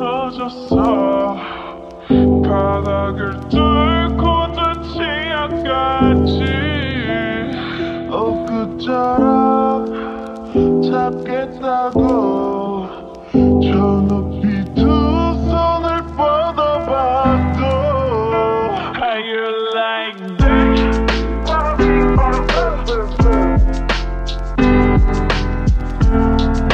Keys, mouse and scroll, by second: 3.0-3.8 typing, 10.9 ctrl+alt+y, 13.3-14.9 typing, 24.1 typing.